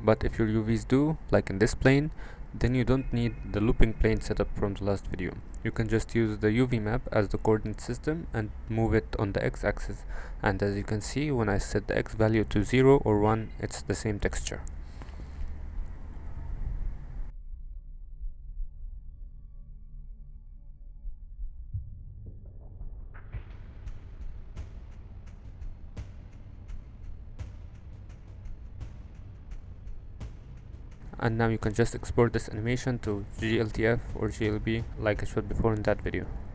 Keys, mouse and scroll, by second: 0.2-2.1 drag, 2.7 click, 3.5 click, 4.2 click, 6.4 drag, 7.0 m, 8.0-8.3 middle drag, 9.2 click, 10.5-15.0 shift+drag, 15.7 click, 15.9 shift+d, 16.6 middle click, 17.9-18.6 drag, 19.3 click, 21.0 click, 22.8 middle click, 23.4-24.8 drag, 25.3 middle click, 27.1 click, 28.0 click, 29.0 click, 30.0-36.4 shift+drag.